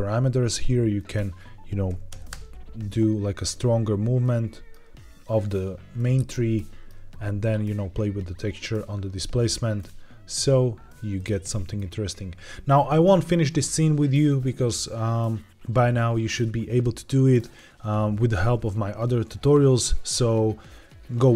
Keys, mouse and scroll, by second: 1.0-3.9 drag, 4.2-6.3 middle drag, 6.5-7.1 shift+middle drag, 7.1-8.9 scroll up 1, 9.7 click, 10.3-11.2 scroll up 1, 11.2-14.1 middle drag.